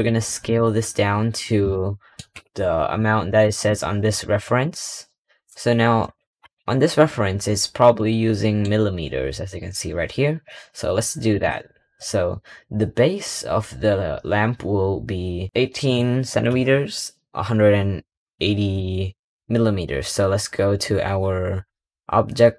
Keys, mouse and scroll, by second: 0.3 click, 1.1-1.6 scroll up 2, 1.6-2.1 shift+middle drag, 2.1-3.1 shift+scroll up 10, 3.1 scroll down 1, 3.3 middle click, 4.0-5.0 scroll down 10, 5.0-5.9 scroll up 4, 5.9 click, 6.3 KP_Decimal, 6.7-7.8 scroll up 7, 7.8-9.4 middle drag, 9.4-10.3 scroll down 1, 10.3-11.2 scroll down 1, 11.2 click, 12.0-12.4 scroll up 3, 12.4-14.5 scroll down 1.